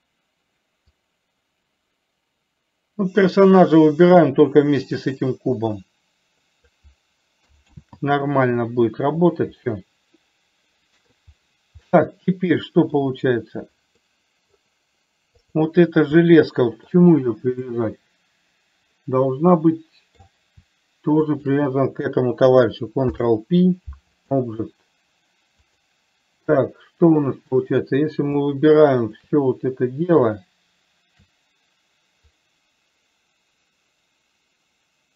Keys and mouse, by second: 1.3-7.2 drag, 8.1 ctrl+z, 10.0-11.5 middle drag, 12.2-13.3 middle drag, 14.5 middle click, 16.5-17.3 middle drag, 18.1-20.6 middle drag, 21.7 shift+click, 23.3 ctrl+p, 26.0 click, 27.8 click, 32.6-35.1 drag.